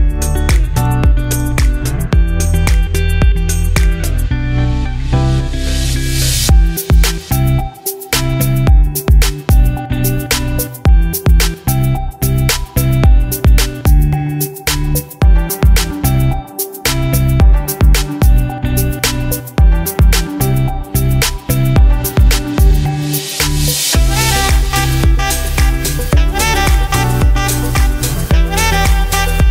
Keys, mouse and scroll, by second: 1.3 scroll up 1, 2.6 click, 2.7-18.0 drag, 19.5 right click, 20.2 scroll down 1, 21.3 click, 22.9-23.3 scroll up 1, 23.3 click, 24.4 g, 26.0-29.5 drag.